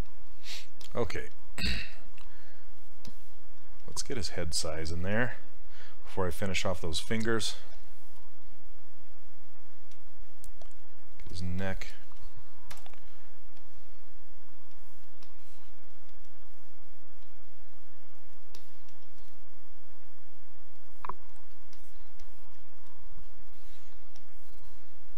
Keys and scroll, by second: 12.8 w.